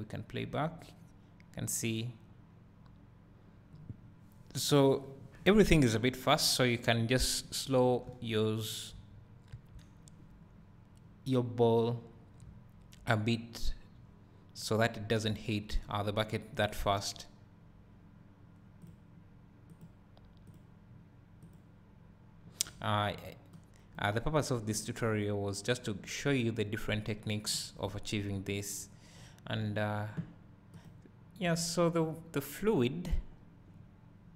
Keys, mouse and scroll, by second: 8.1-8.7 drag, 9.6 Escape, 12.9-24.8 drag, 16.8-18.9 scroll up 2, 24.8-30.9 right drag, 30.9 click, 32.4-32.9 scroll down 1.